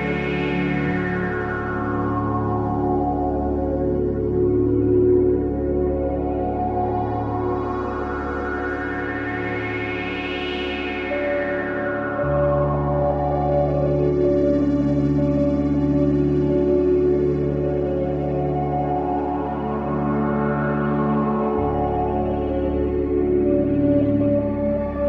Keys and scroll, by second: 2.6 4, 6.1 F9, 7.3 3, 11.5 Delete, 17.2 ], 19.1 ], 19.9 ctrl+z.